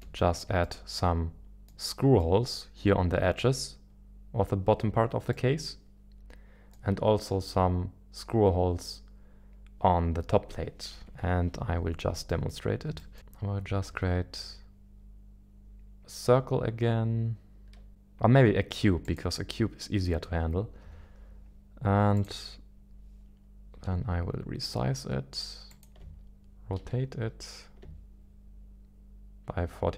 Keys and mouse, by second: 0.6-1.7 middle drag, 2.2-2.6 middle drag, 5.3-6.7 middle drag, 10.9 KP_1, 11.2 KP_1, 11.2 KP_7, 12.5 shift+middle click, 13.0 shift+middle click, 13.8 shift+a, 20.8 g, 22.1 click, 23.7 g, 23.9 ctrl+s, 25.7 ctrl+click, 26.8 r.